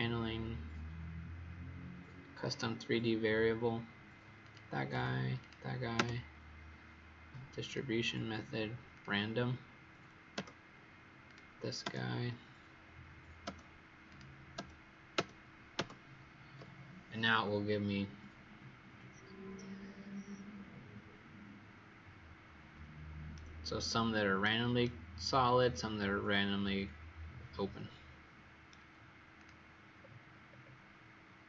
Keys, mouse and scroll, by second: 5.3 click, 11.2 click, 12.6-13.4 scroll down 2, 14.0 click, 22.4-23.3 scroll up 4, 23.3 right click, 29.3 click, 29.9 scroll down 1.